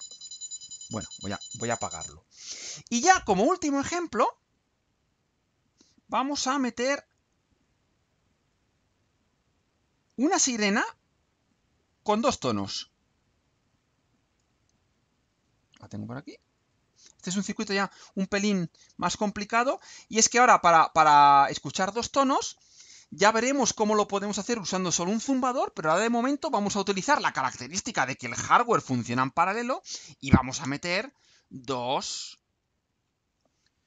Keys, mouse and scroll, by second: 8.7 click, 10.3 click, 11.5 click, 12.3 click, 13.3 click, 15.2 click, 16.2 click, 17.1 scroll down 2, 17.9 scroll down 2, 18.3-19.5 right drag, 19.5-19.9 scroll up 2, 19.9-21.7 right drag.